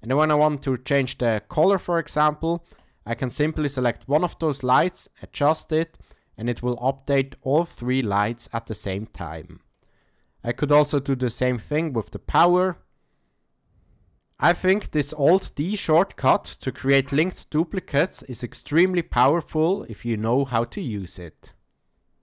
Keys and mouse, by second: 2.8 click, 10.7-15.5 drag, 15.9-17.0 middle drag.